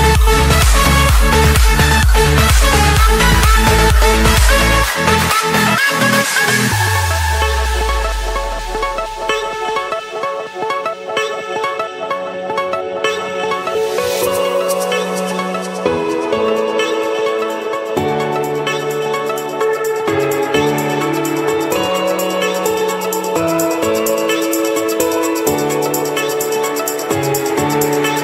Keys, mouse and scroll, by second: 0.2 click, 0.4 Escape, 0.9 right click, 2.3 click, 3.8 click, 5.6 scroll, 5.9 scroll up 5, 6.4-7.2 scroll down 1, 7.3-7.6 scroll, 9.1 click, 10.6 click, 11.0 scroll up 4, 11.3 Escape, 11.6 scroll, 12.5 click, 13.1 click, 14.6 click, 15.0 click, 16.2-17.1 typing, 17.6 Return, 19.1-20.2 drag, 20.0 Escape, 21.0-22.6 typing, 23.6 Return, 25.3-27.5 drag.